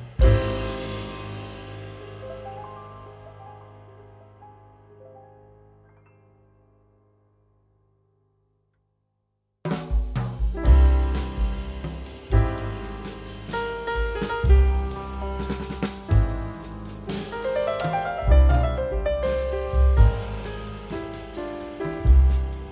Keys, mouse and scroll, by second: 0.8 scroll down 1, 1.2 scroll up 1, 1.8 2, 3.3 typing, 7.0 right click, 9.6 double click, 10.6-11.4 typing, 10.8 Tab, 12.8 scroll down 1, 13.4 3, 13.9 scroll up 1, 14.6 3, 15.5 scroll down 1, 16.1 3, 16.8 scroll down 1, 17.2 scroll up 1, 17.8 3, 20.3 scroll up 1, 20.9 3, 21.8 scroll up 1, 22.4 3.